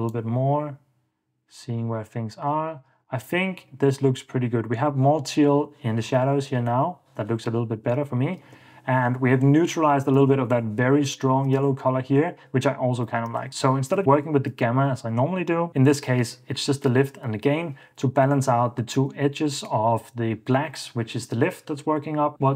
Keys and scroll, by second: 2.7 super+f, 3.1 super+d, 6.4 super+d, 8.1 super+d, 11.8 super+d.